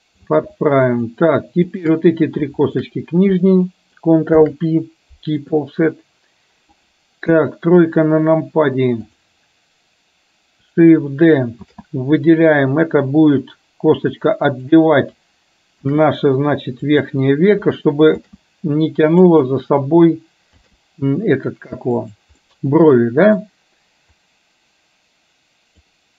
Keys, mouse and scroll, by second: 1.0 shift+click, 2.7 shift+click, 4.4 ctrl+p, 7.4 KP_1, 9.1 click, 11.7 shift+d, 16.0 shift+d, 18.4 shift+d, 22.6 middle click, 24.2-25.9 drag.